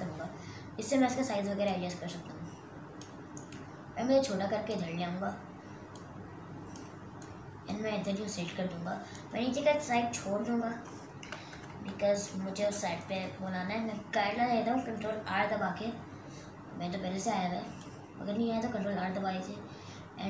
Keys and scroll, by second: 11.7 Return.